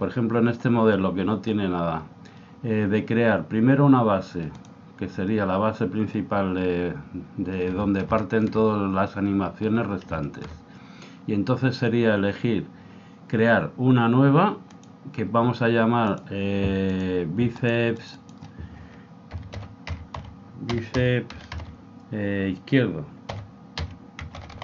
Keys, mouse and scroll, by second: 4.6 click, 8.1-11.9 middle drag, 14.7-20.0 drag.